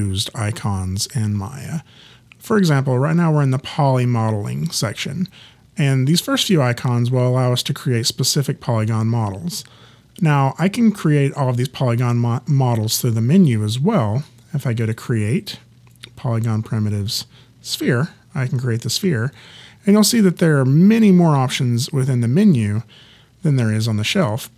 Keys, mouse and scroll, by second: 14.8 click.